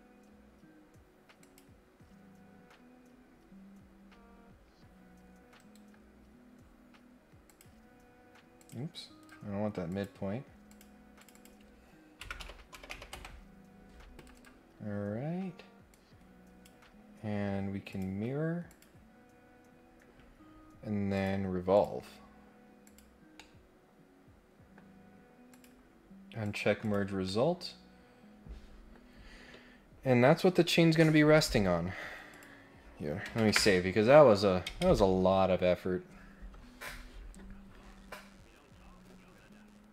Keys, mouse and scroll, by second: 1.4 click, 2.1 scroll down 1, 5.6 Escape, 6.3 scroll down 1, 6.5 scroll up 1, 7.4 click, 8.6 click, 9.2 Escape, 9.9 click, 10.6 click, 11.3 click, 14.1 Escape, 14.3 Escape, 14.7 scroll down 2, 15.9 click, 17.9 click, 18.6 click, 19.4 scroll up 1, 19.5 scroll down 2, 21.1 click, 21.7 click, 22.8 click, 23.3-24.7 middle drag, 25.5 click, 26.4 click, 26.8 click, 27.2-28.9 middle drag, 32.3 click.